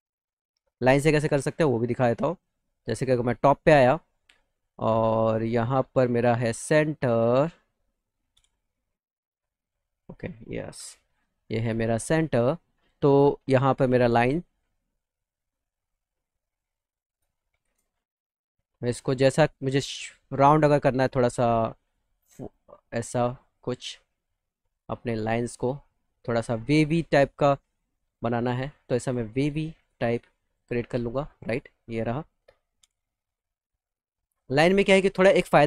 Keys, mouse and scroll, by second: 1.3 middle click, 1.7-2.7 scroll, 2.9-3.5 scroll up 4, 4.4 middle click, 7.5 middle click, 9.1 alt+middle click, 11.7 middle click, 13.6 click, 14.7 middle click, 17.4 shift+f, 18.4 middle click, 19.3 click, 20.9 click, 21.8 click, 23.1 click, 23.6 middle click, 24.7 click, 25.8 click, 26.7 middle click, 27.5 click, 28.6 click, 29.3 click, 30.1 click, 30.7 right click, 31.3 middle click, 31.6 middle click, 31.9 middle click, 32.1 middle click, 33.0 middle click, 33.4 alt+middle click, 34.3 middle click, 34.7 middle click, 35.0 alt+middle click, 35.5 middle click.